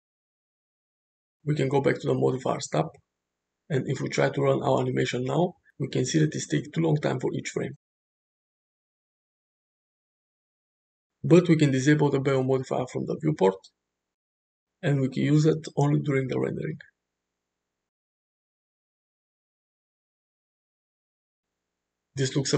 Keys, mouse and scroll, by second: 3.9 space, 9.8 space, 12.2 click, 13.4 click, 13.8 space, 15.5-15.9 middle drag, 16.1 space, 18.0 space, 20.9 space, 21.7-22.5 middle drag.